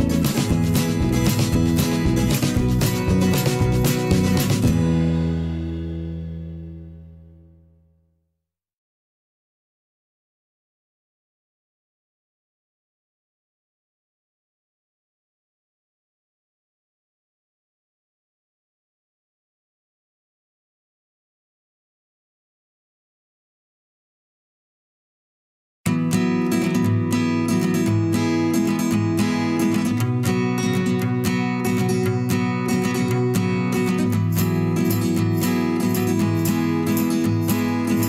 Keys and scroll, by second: 3.2 v, 4.9 z, 8.0 v, 16.8 Delete, 19.6 a.